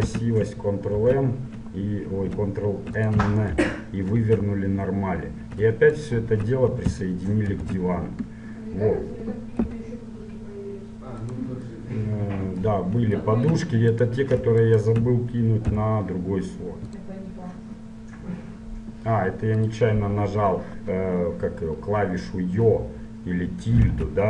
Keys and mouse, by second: 0.3 a, 1.1 ctrl+m, 3.7 ctrl+n, 4.3 Tab, 6.1 right click, 7.8 ctrl+j, 9.9 g, 14.1-16.8 right drag, 15.9 m, 19.8-21.9 drag, 24.1 `.